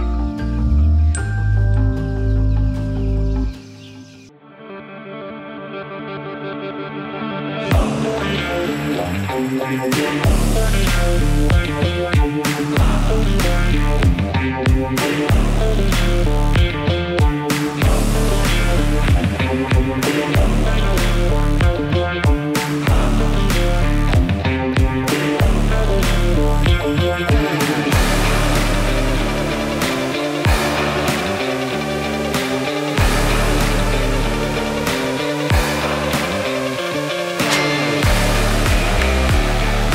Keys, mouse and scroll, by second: 0.0 middle click, 1.3-8.0 drag, 8.0-10.3 drag, 12.3 6, 14.3 click, 16.3-17.2 typing, 17.8 scroll up 1, 18.7 typing, 19.5-21.3 drag, 21.3 scroll up 1, 22.6-25.4 drag, 31.6-36.0 drag, 36.2 scroll up 1, 36.4 scroll down 1, 38.0 click, 39.6 scroll down 1.